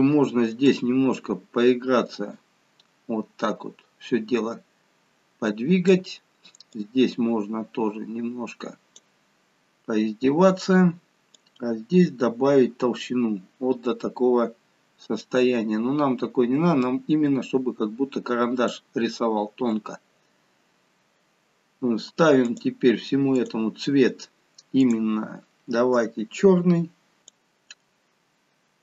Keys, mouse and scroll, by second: 0.6 click, 6.6 click, 11.2 click, 22.3 click, 23.2 click.